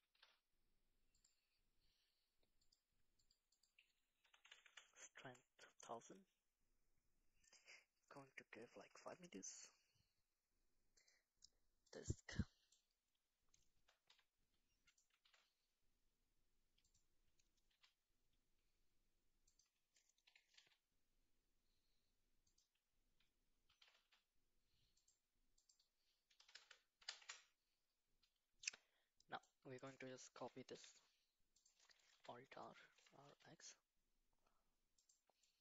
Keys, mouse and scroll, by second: 0.0 g, 2.7 click, 3.2 click, 3.5-5.3 drag, 4.5 KP_0, 4.6 KP_0, 11.0 click, 13.7 g, 15.2 g, 17.7 s, 20.2 r, 23.7 g, 25.6-27.2 drag, 26.6 KP_0, 29.1-29.4 middle drag, 30.4 shift+d, 32.1 alt+r, 32.9 r.